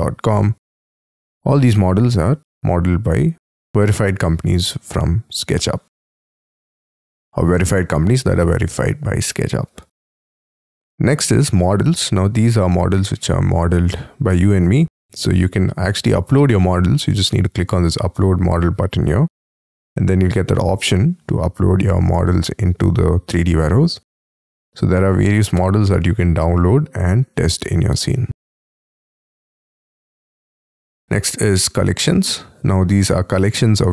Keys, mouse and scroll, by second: 0.4-1.1 scroll down 10, 1.1-1.8 scroll down 1, 1.8-5.7 scroll down 2, 5.7 scroll up 4, 6.6-9.4 scroll up 6, 9.4-14.9 scroll up 11, 23.8-25.4 scroll down 4, 25.4-26.2 scroll down 3, 26.5-26.9 scroll down 3, 30.1 scroll down 5, 30.4-31.7 scroll up 15.